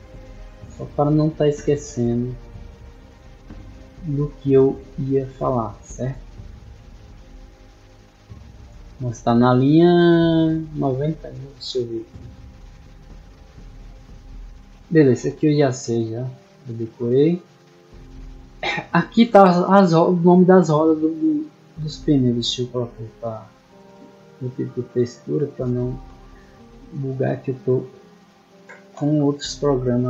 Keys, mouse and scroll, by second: 0.3 click, 1.1-1.9 scroll down 2, 2.5 click, 3.7 click, 4.2-7.2 scroll up 2, 7.6 middle click, 11.1 scroll down 1, 11.7-12.1 scroll down 2, 12.6-14.4 middle drag, 17.3 click, 22.3 middle click, 22.6 middle click, 23.3 click, 23.8 click, 25.0-25.4 middle drag, 26.4 middle click, 26.8-27.5 scroll down 2, 27.9 right click, 29.7 click.